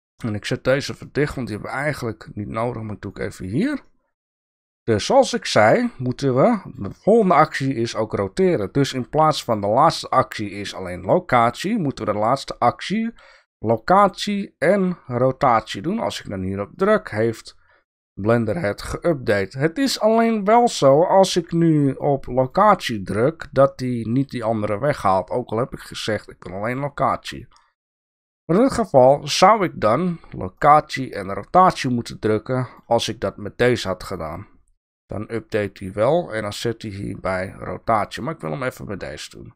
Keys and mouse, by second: 1.1-3.1 drag, 3.9 shift+drag, 3.9-4.5 shift+middle drag, 5.5-6.8 drag, 9.1 i, 21.3 i, 27.2 i.